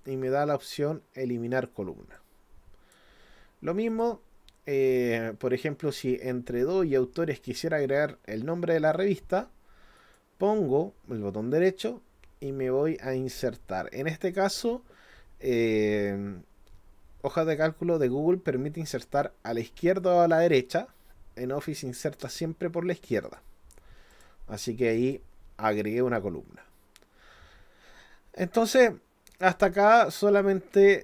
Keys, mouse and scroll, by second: 2.2 click, 3.9 click, 10.0 right click, 23.2 click, 24.1 click, 25.0 click, 29.5 click.